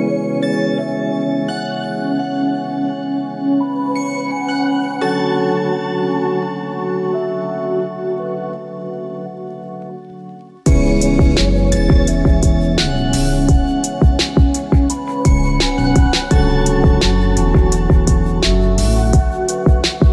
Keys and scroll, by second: 13.0 ctrl+i.